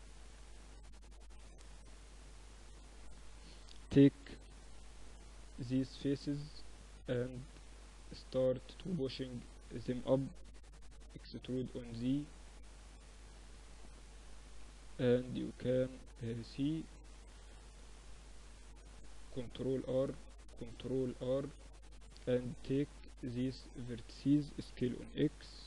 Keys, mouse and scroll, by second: 3.4 ctrl+r, 5.5 click, 5.9-12.3 middle drag, 9.6 e, 17.5-19.4 drag, 18.7 ctrl+r, 19.9 ctrl+r, 21.7-23.5 drag, 22.3-23.5 right drag, 23.5-24.9 drag, 23.5 right click, 23.7 s.